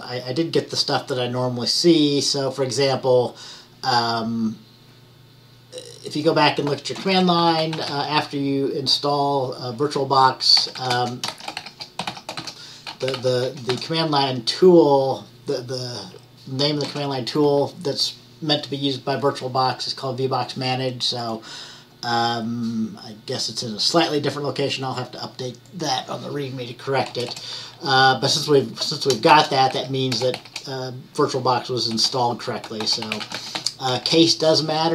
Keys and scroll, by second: 7.7-8.6 typing, 10.6-14.5 typing, 29.6-30.6 typing, 32.0-34.7 typing.